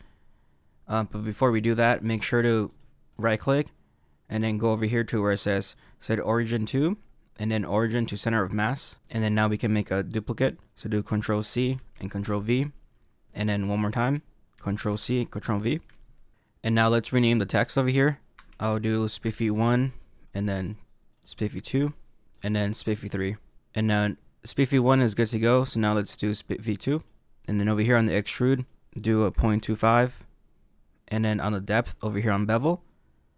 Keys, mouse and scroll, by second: 2.0 click, 2.6 click, 3.1 right click, 11.4 ctrl+c, 12.2 ctrl+v, 14.5 ctrl+c, 15.4 ctrl+v, 18.3 f, 21.1 click, 21.2 click, 22.2 f, 22.9 click, 23.1 click, 23.6 f, 25.3 click, 26.9 click, 28.5 click.